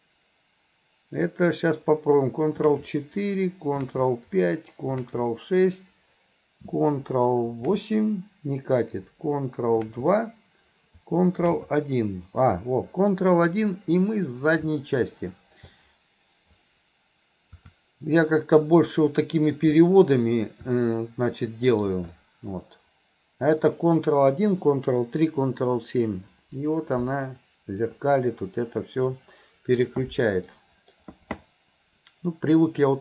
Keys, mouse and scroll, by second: 14.9-15.8 middle drag, 18.3-19.6 middle drag, 20.8-21.7 middle drag, 22.2-23.6 middle drag, 27.0-29.8 middle drag, 30.6 middle click, 32.4-33.0 middle drag.